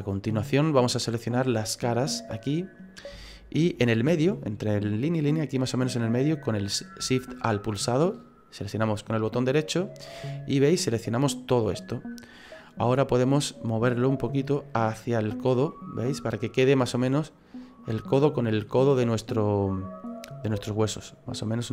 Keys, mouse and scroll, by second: 0.0-2.1 scroll up 4, 2.1 click, 3.3 alt+shift+right click, 9.3 alt+shift+right click, 10.3 middle click, 12.6 middle click, 14.3 click, 15.7 middle click, 18.0 click, 18.6 middle click, 20.5 click, 21.6 middle click.